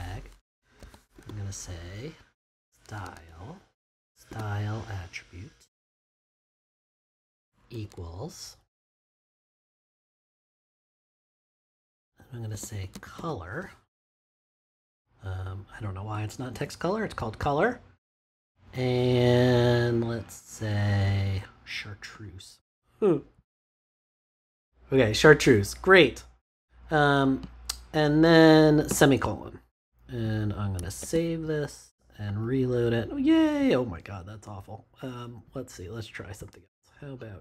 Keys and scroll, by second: 0.7 s, 1.1 t, 2.2 -, 3.0 BackSpace, 4.2 t, 5.4-6.4 typing, 7.6 =, 7.8 space, 12.2-14.0 typing, 16.4 shift+;, 28.8 typing, 30.9 super+s.